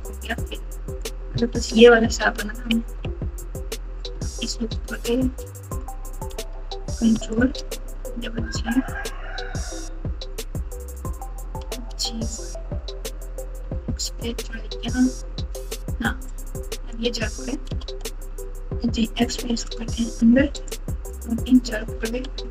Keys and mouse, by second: 0.8 click, 1.4-2.9 typing, 4.9 alt+click, 5.7 click, 6.1 click, 8.0 g, 11.6 g, 16.4 click, 17.6 g, 21.0 click, 21.2 click, 22.3 g.